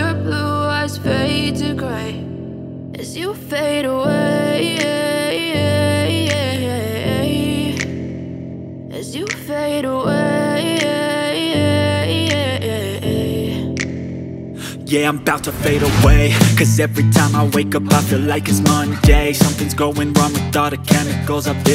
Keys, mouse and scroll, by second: 0.0-1.0 typing, 1.7-4.1 alt+drag, 5.4 ], 6.2-8.6 alt+drag, 9.7 alt+click, 10.8 alt+click, 11.6-16.6 alt+drag.